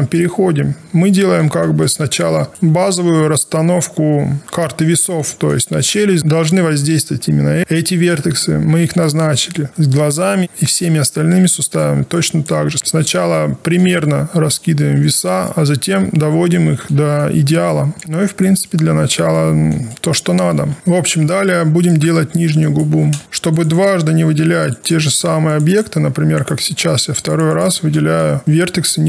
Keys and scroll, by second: 20.6 w.